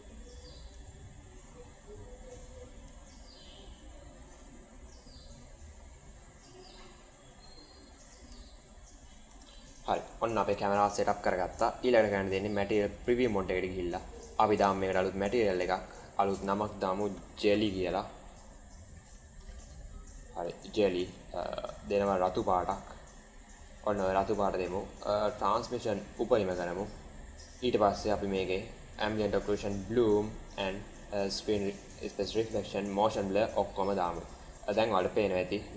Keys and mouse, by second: 0.9-1.6 shift+middle drag, 2.9-4.1 shift+middle drag, 5.2-6.5 middle drag, 6.8 shift+middle click, 7.6 shift+middle click, 8.3 shift+middle click, 9.2 space, 9.8 click, 12.0 click, 13.7 click, 14.4 click, 15.3 click, 16.2-20.5 drag, 17.5 l, 19.4 BackSpace, 26.0 click, 28.9 click, 29.4 click, 30.5 click, 33.0 click, 35.0 KP_0.